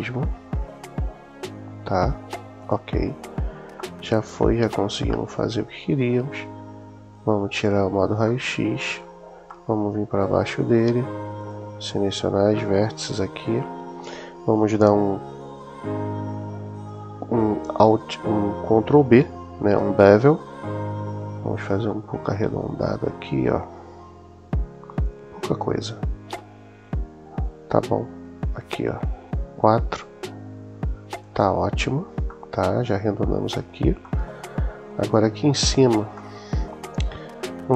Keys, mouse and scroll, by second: 2.4 click, 3.6-5.5 middle drag, 7.4 click, 8.1 middle click, 9.4 middle click, 11.2 click, 12.3-13.5 middle drag, 19.4 super+b, 31.0 click, 32.1-33.6 middle drag, 33.9-34.9 middle drag, 36.0 middle click.